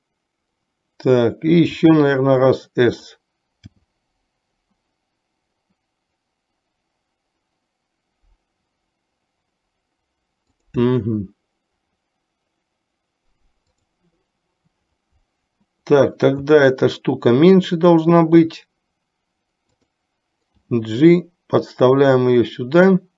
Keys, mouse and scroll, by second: 1.9 s, 3.8 g, 13.9 click, 16.5 s, 20.7 g.